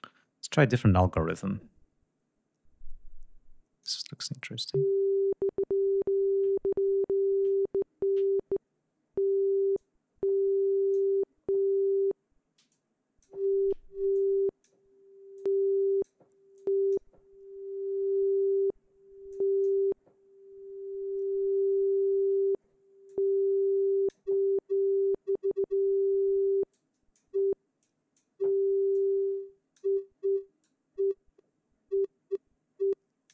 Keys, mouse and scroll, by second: 0.9-3.7 drag, 9.4-10.8 drag, 12.4-13.1 drag, 13.8-14.5 drag, 15.0 click, 16.2 click, 19.0 click, 22.7-23.9 drag, 26.4-27.0 drag, 27.5 click, 28.6 click, 30.3-33.1 drag.